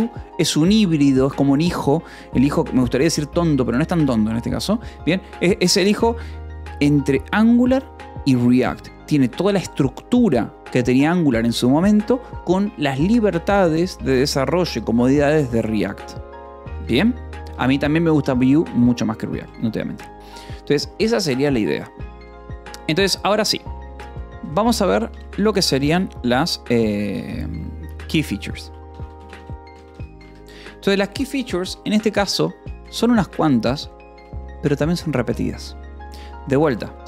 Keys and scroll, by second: 17.9 Escape, 18.8 j, 19.5 j, 23.2 o, 23.6 Return, 24.7-30.4 typing, 31.6 Return, 32.6-34.0 typing, 36.9-37.0 typing.